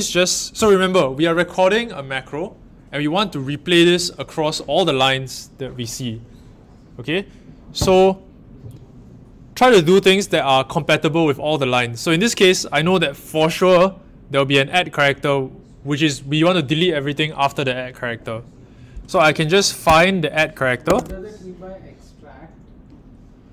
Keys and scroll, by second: 19.8 f, 20.8 shift+2.